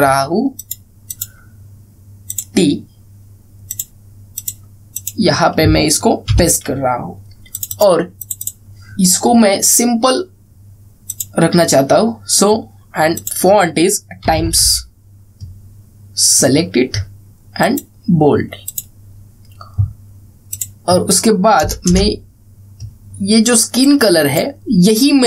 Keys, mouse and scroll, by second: 0.1 ctrl+c, 1.2 click, 7.0 ctrl+v, 8.2 click, 10.8-11.1 scroll up 1, 11.8 click, 14.7-15.8 typing, 17.0 click, 22.5 Return, 24.5-25.1 drag.